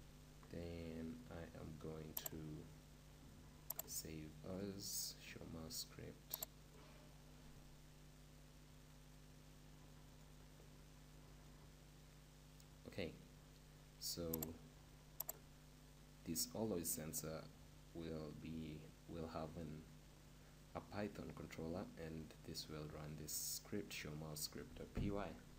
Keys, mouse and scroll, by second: 6.8-8.2 drag, 11.7 middle click, 25.5 p.